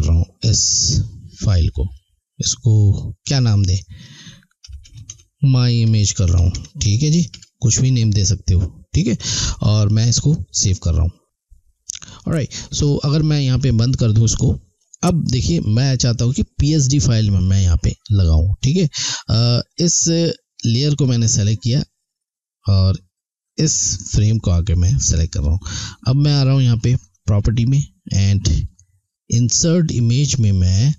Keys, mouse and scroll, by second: 4.4-7.0 typing, 10.0 click, 13.5 click, 19.7 click, 23.4 click, 27.0 click, 30.6 click.